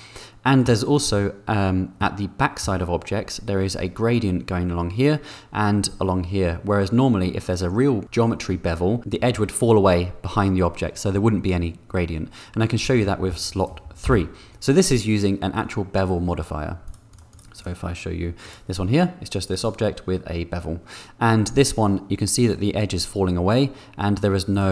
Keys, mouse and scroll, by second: 0.3 middle click, 1.9 middle click, 13.6 click, 14.3 3, 16.8 click, 17.1 click, 17.3 click, 17.6 click.